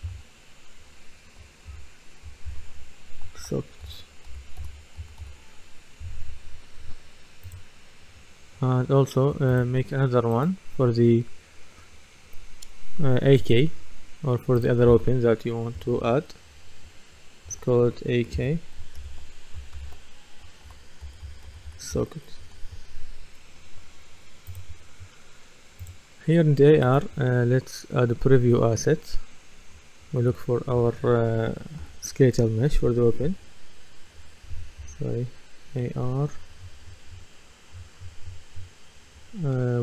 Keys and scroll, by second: 0.0 F2, 3.2-6.1 typing, 6.1 Return, 15.8 F2, 17.5 shift+a, 19.0 shift+k, 20.4-22.2 typing, 22.4 Return, 31.5 typing, 34.8 BackSpace.